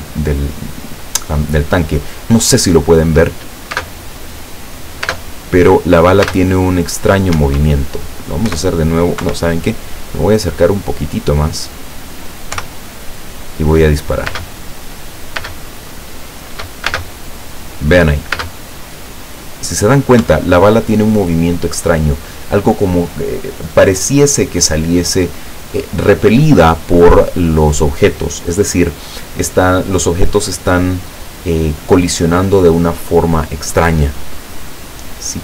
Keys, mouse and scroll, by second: 3.8 space, 5.2 space, 6.4 space, 7.4 Escape, 8.5 p, 9.3 Escape, 10.4-10.8 scroll up 2, 11.1 scroll up 2, 12.6 p, 14.4 space, 15.5 space, 17.0 space, 18.4 space, 20.3 Escape.